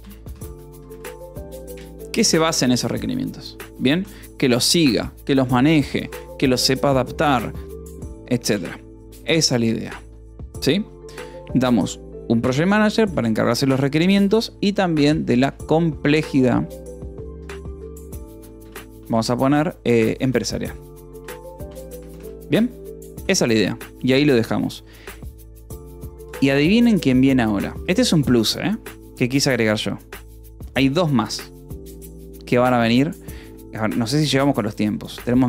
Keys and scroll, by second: 0.0-1.0 typing, 1.6 Return, 2.3 Escape, 3.3 ctrl+s, 3.6 k, 4.5 ctrl+s, 13.5-22.7 typing, 22.7 ctrl+s, 23.0 Return, 26.7 Escape, 27.1 j, 30.6 k, 35.3-35.4 typing.